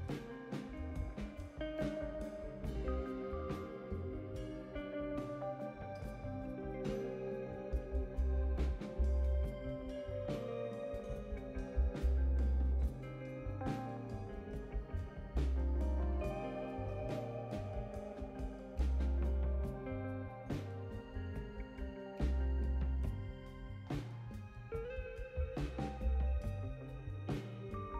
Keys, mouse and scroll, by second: 0.0 click, 8.7 click, 8.9 click, 10.5-10.9 scroll down 3, 10.8 middle click, 11.7 right click, 18.2 click, 19.4 click, 20.6 click, 21.7 click, 22.7 click, 23.8 m, 25.9 right click, 26.7 click.